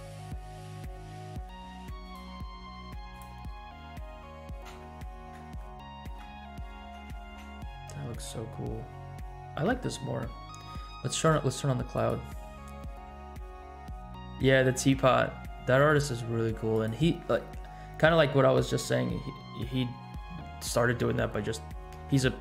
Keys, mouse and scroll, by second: 3.1 click, 3.4 scroll up 2, 3.8-4.4 shift+middle drag, 4.6 space, 5.6 shift+middle click, 6.9 space, 7.4 space, 8.3 scroll down 2, 10.0-10.4 scroll down 1, 11.1 space, 12.0-12.5 drag, 16.7 click, 21.4 scroll up 1.